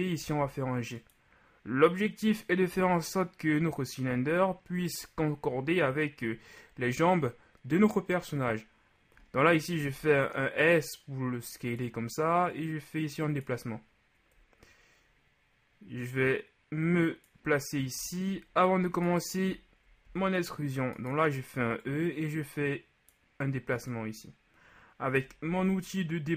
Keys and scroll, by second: 2.8 z, 9.8 shift+s, 20.1 alt+shift+e, 25.5 ctrl+z.